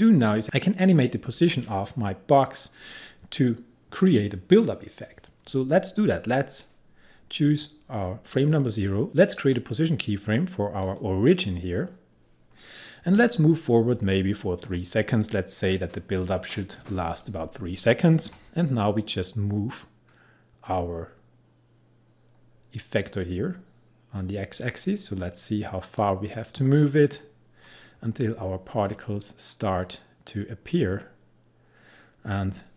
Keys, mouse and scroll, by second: 6.0-9.1 drag, 10.9 click, 14.2 click, 19.3-32.7 drag.